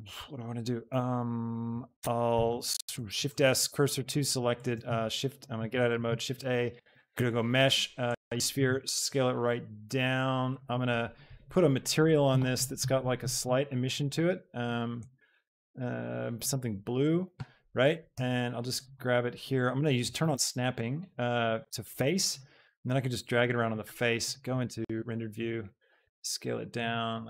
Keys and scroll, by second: 2.3 shift+a, 3.1 shift+s, 4.9 shift+a, 8.7 s, 18.2 g, 22.6 g, 24.5 shift+g, 25.9 shift+s.